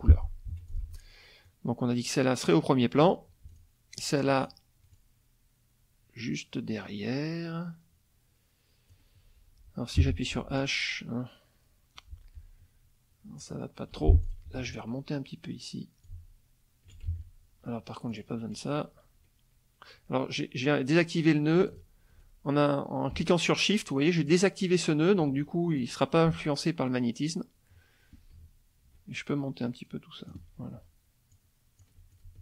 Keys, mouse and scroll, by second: 0.5 F1, 0.7 click, 1.4-3.2 drag, 3.5 shift+click, 4.4 shift+click, 4.9-9.1 drag, 10.0 h, 10.6-13.6 drag, 13.9 F2, 14.2 ctrl+click, 14.6 ctrl+a, 16.1 click, 17.1 ctrl+alt+z, 18.1 shift+click, 21.7 shift+click, 24.2 shift+click, 25.8-30.5 shift+drag, 31.3 alt+click, 32.1-32.4 alt+drag.